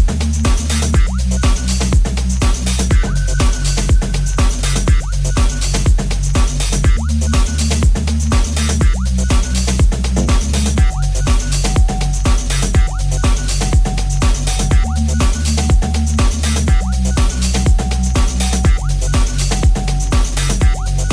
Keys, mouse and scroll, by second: 1.0 g, 5.9 r, 5.9 g, 12.6-17.1 middle drag, 17.2-19.3 middle drag, 19.3 shift+click, 19.4 shift+middle click, 20.0 shift+click, 20.1-21.1 shift+middle drag.